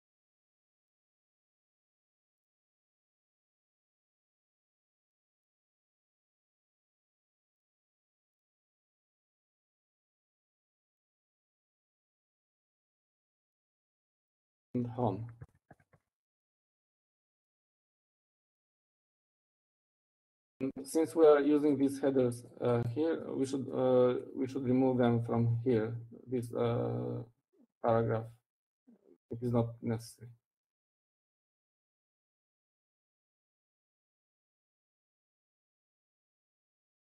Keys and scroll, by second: 2.1 ctrl+alt+Up, 2.6-3.0 Up, 3.6 Up, 4.1 Right, 4.6 Right, 5.0 Right, 5.5 Right, 25.8 Down, 26.0-27.6 Down, 28.0 Down, 29.8 Down, 31.1 Up, 31.8 Left, 32.1-32.5 Left, 33.1 Left, 33.6 Left, 33.8 Left, 34.1 Left, 35.1 Left, 36.0-36.5 typing, 36.8 Down.